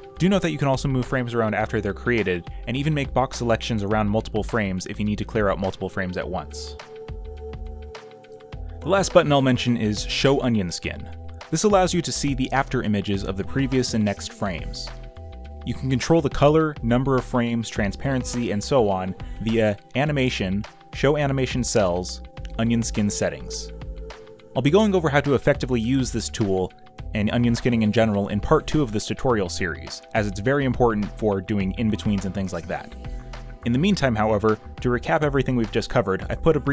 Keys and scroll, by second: 4.7 space, 4.8 z, 5.2 space, 16.4 ctrl+z, 18.5 ctrl+z, 21.1 b, 22.7 ctrl+v, 25.8 ctrl+c, 34.9 z, 36.4 b, 36.5 ctrl+z.